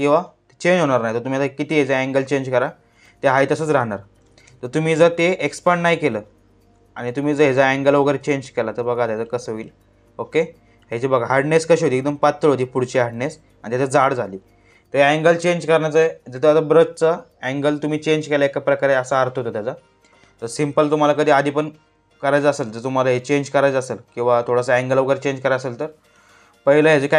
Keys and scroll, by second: 3.9 ctrl+z, 20.0 ctrl+z.